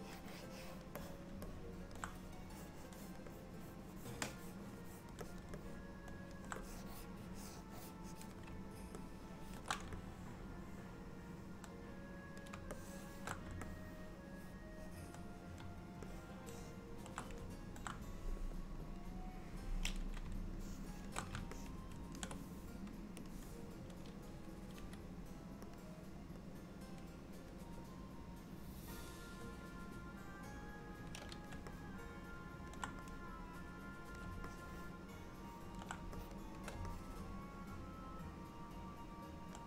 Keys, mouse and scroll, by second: 0.3 click, 1.1 click, 1.5 middle click, 2.5 click, 3.4 click, 4.9 click, 5.3 click, 5.7 middle click, 6.7 click, 9.0 ctrl+middle click, 10.1 middle click, 12.8 shift+middle click, 13.7 middle click, 16.2 ctrl+middle click, 18.8 KP_1, 20.7 shift+middle click, 21.6 ctrl+middle click, 23.4 click, 24.8 f, 26.6 click, 28.0 click, 30.6 click, 31.8 middle click, 33.2 click, 34.6 middle click, 36.2 shift+click, 37.0 middle click.